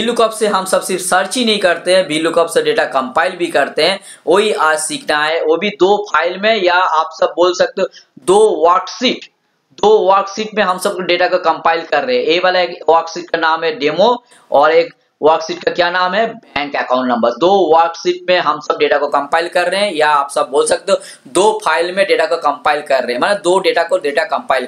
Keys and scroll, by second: 14.6 alt+Tab.